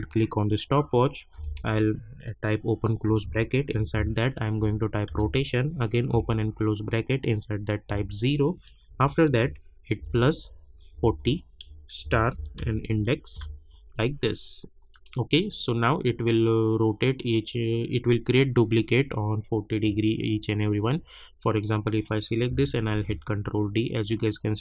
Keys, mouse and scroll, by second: 1.3 [, 1.5 ], 3.0 Left, 3.5-4.5 typing, 5.0 Return, 6.1 [, 8.8 Right, 9.9-13.2 typing, 13.3 Return, 14.9 click, 22.0 click, 22.9 ctrl+d.